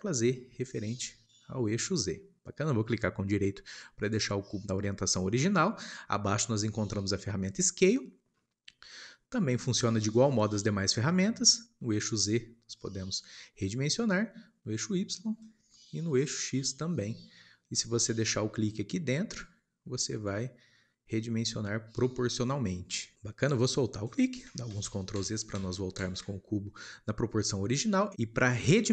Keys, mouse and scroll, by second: 14.7 click, 19.5 click, 24.6 ctrl+z, 25.1 ctrl+z, 27.4-28.2 shift+middle drag.